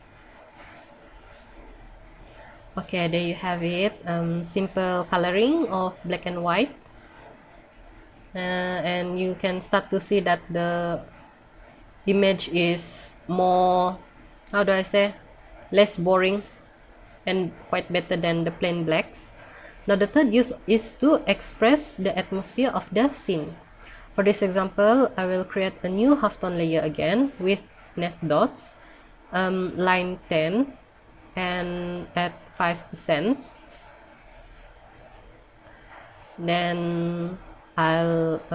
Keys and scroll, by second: 0.5 scroll up 1, 38.1 scroll up 1.